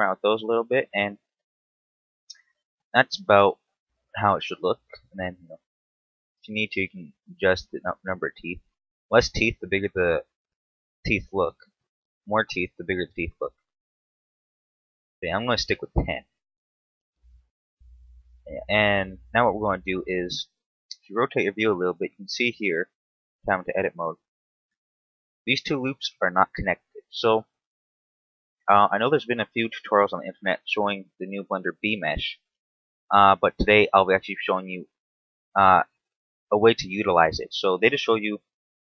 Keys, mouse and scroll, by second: 2.4-3.1 scroll up 1, 3.1-4.0 scroll up 1, 4.2 shift+middle click, 5.4 click, 6.7 click, 8.0 click, 12.8 click, 13.0 click, 13.4 click, 13.6 click, 14.1 click, 15.1 click, 15.9-16.4 scroll down 1, 16.4 shift+middle click, 17.5 scroll down 2, 18.3 scroll down 1, 18.5-19.3 scroll up 4, 19.3 middle click, 20.7 scroll up 2, 21.3 shift+middle click, 21.7-22.0 scroll up 1, 22.8 Tab, 24.5 alt+right click, 25.1 alt+shift+right click.